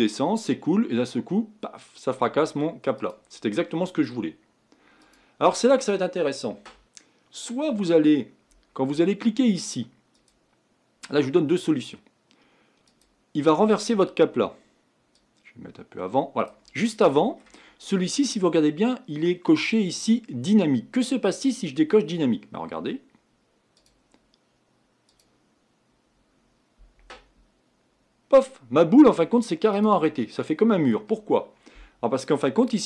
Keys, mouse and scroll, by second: 3.7-5.0 middle drag, 5.0-16.9 drag, 16.9 middle click, 17.7-19.9 scroll up 4, 21.4 click, 22.0-22.7 scroll down 4, 23.7-30.4 drag, 30.4-31.4 middle drag, 31.4-32.2 scroll up 4.